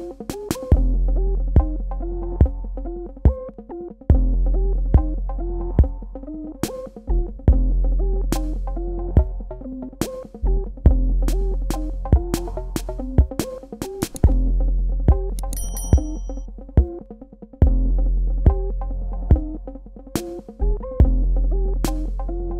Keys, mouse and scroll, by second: 0.7 KP_Subtract, 1.8 click, 7.4 p, 9.3 KP_Add, 11.3 super+KP_Subtract, 16.7 ctrl+click, 18.3 click.